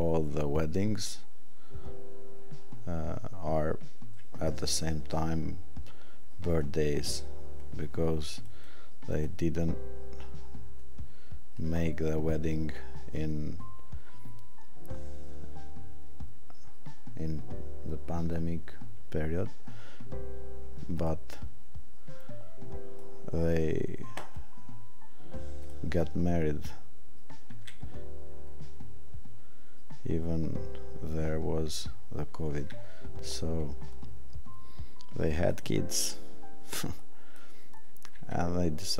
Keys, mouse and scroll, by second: 20.9 click, 35.5 click.